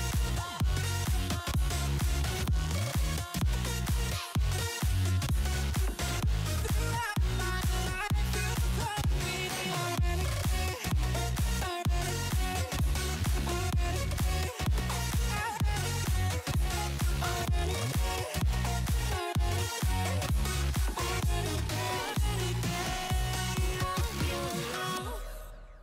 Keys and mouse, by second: 0.2 click, 1.4 click, 2.3 click, 3.0 click, 3.6 click, 4.6 click, 5.1 click, 5.3 space, 5.4 click, 5.8 click, 9.6 click, 10.5 alt+click, 11.1 click, 12.0 alt+click, 12.5 click, 12.8 click, 15.0 ctrl+t, 15.9 click, 16.3 click, 16.6 click, 17.0 click, 17.3 click, 17.8 click, 18.1 Return, 19.5 click, 22.8 ctrl+click, 24.5 alt+click, 24.8 click.